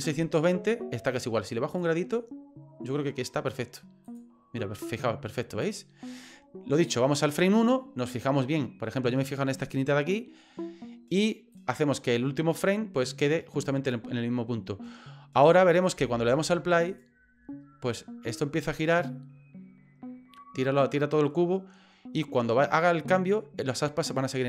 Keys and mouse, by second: 1.7 click, 4.0 click, 5.6 click, 7.2 click, 11.5-13.9 drag, 15.4 right click, 16.0 space, 16.9 right click.